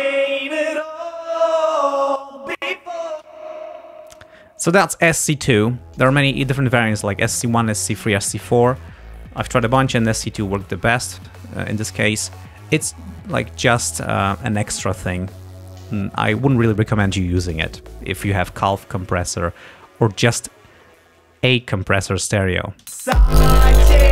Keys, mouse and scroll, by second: 3.2 space, 4.3 click, 12.3 click, 15.0 click, 22.8 space.